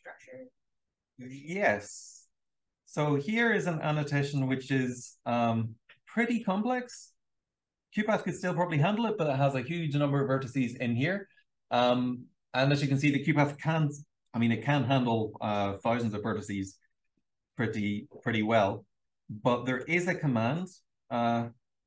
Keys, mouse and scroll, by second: 0.0-0.8 scroll down 2, 0.0 BackSpace, 0.8-1.4 scroll down 1, 0.8 w, 1.4-4.4 drag, 1.4-3.2 scroll down 1, 3.3-4.4 scroll down 2, 4.4-4.9 scroll down 1, 4.9-6.4 scroll up 2, 6.4-7.2 scroll up 1, 7.2-8.6 scroll up 1, 8.6-9.6 scroll up 1, 9.6-10.2 scroll up 1, 10.2-11.6 scroll down 2, 11.6-12.8 scroll down 1, 12.8-13.6 scroll down 1, 13.6 scroll down 1, 13.6 m, 14.2 click, 16.0-18.3 shift+scroll down 3, 16.0 shift+f, 16.5 shift+f, 17.5-18.8 drag, 18.3-18.8 scroll down 1, 21.8 l.